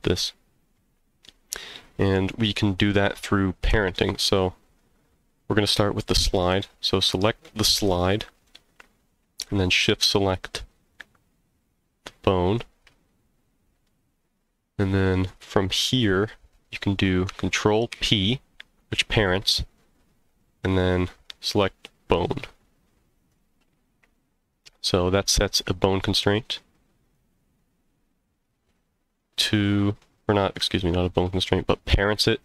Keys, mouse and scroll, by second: 3.1-3.9 middle drag, 6.4 click, 7.4-8.4 middle drag, 10.9 shift+click, 11.6 shift+click, 18.1 ctrl+p, 27.0 click, 28.4 click, 29.3 click, 30.0-30.4 middle drag, 30.7-31.3 shift+middle drag.